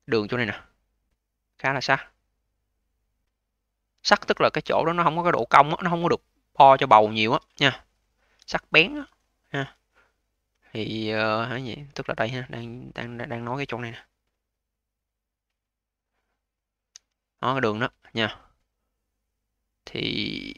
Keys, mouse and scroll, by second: 6.2 scroll up 2, 7.6 alt+click, 8.4-9.1 scroll down 2, 9.1-11.2 alt+drag, 11.2-12.6 alt+middle drag, 12.6-16.8 drag, 16.8 v, 20.5 click.